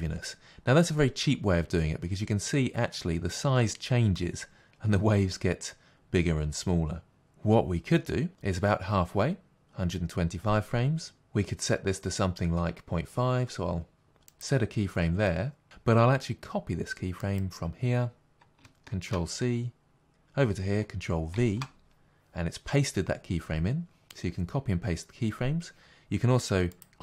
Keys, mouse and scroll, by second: 17.2-26.8 drag, 21.4 ctrl+v.